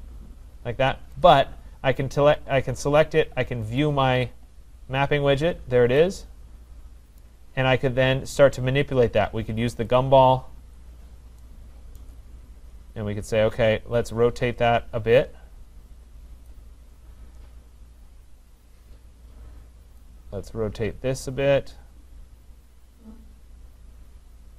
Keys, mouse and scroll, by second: 1.2 click, 4.0 click, 5.5-6.3 scroll, 6.3-6.7 scroll, 7.2 right click, 10.0 click, 11.6 click, 12.0 right click, 12.9-15.1 scroll, 16.5 click, 19.0 click.